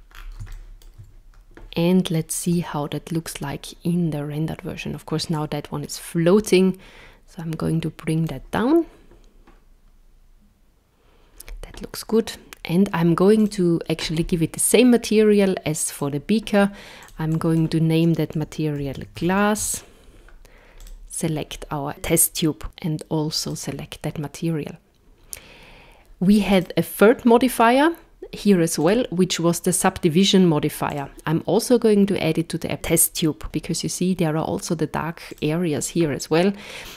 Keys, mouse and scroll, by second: 0.5 shift+middle click, 2.4 z, 5.3 click, 13.4 click, 15.9 click, 17.0 click, 19.3 s, 20.8 click, 22.3 click, 26.5 click, 28.8 click, 30.9 click, 35.3 click.